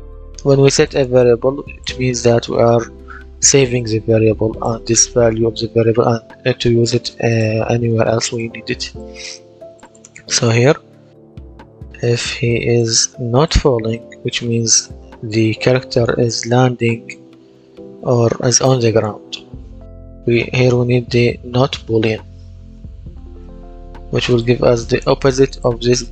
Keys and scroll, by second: 20.1-21.3 typing, 22.6-23.9 typing.